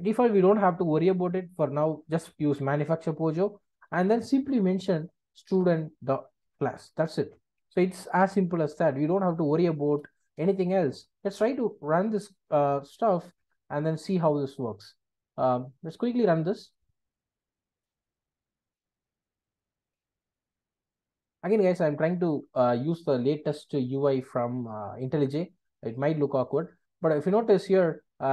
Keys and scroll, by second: 5.5 Return, 8.8 alt+Return, 12.5 Return.